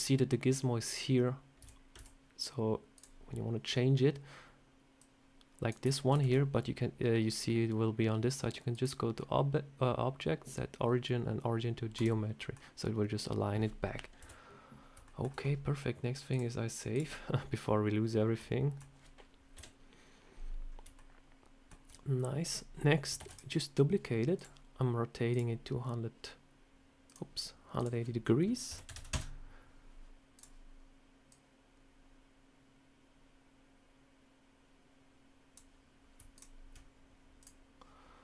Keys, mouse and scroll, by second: 1.5 Tab, 1.8 Tab, 2.8 click, 4.8 click, 6.0 ctrl+z, 8.6 click, 12.2 middle click, 14.1 KP_7, 14.9 shift+middle click, 16.2 click, 17.9 scroll down 2, 18.2 middle click, 19.4 KP_7, 20.5 scroll up 1, 20.8 shift+middle click, 23.1 shift+d, 24.2 click, 25.2 click, 26.9 click, 27.6 click, 30.2 click, 31.2 click, 36.2 shift+click, 37.3 click.